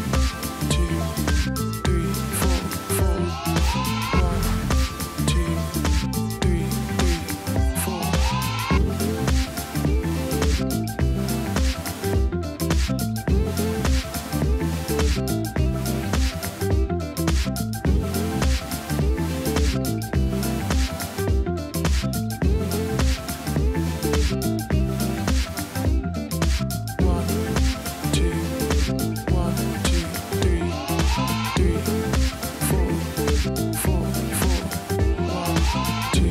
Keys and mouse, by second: 1.7 click, 3.8 click, 6.3 g, 7.3 click, 7.6 shift+click, 10.9 alt+click, 14.7 click, 16.3 c, 16.6 v, 16.8 click, 18.0 click, 19.1 shift+click, 19.7 b, 20.1 v, 20.1 click, 20.5 Right, 21.7 Left, 22.3 click, 23.1 alt+BackSpace, 23.5 ctrl+d, 24.5 click, 25.6 click, 27.0 click, 27.7 click, 30.1 click, 33.1 click, 35.0 click.